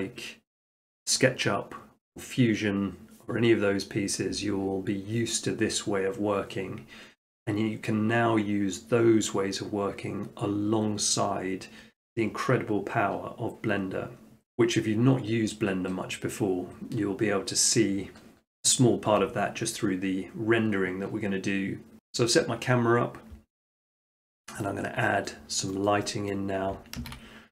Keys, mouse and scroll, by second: 24.2 middle click, 24.3 middle click, 24.5 middle click, 24.6 middle click, 24.7 middle click, 25.4 middle click, 25.9 shift+middle click, 26.0 shift+middle click, 26.3 middle click, 27.0 a.